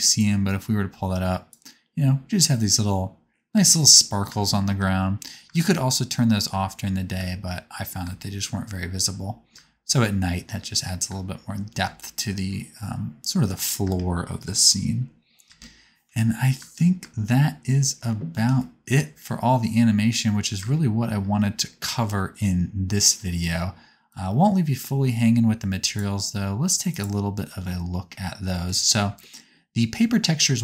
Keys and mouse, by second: 0.1-4.1 drag, 3.5-8.0 typing, 7.2-12.8 drag, 9.2 space, 9.5 space, 11.1 space, 11.8 space, 13.8 space, 15.4 space, 16.6 space, 16.8-19.9 drag, 16.9 space, 20.5 space, 26.5 click.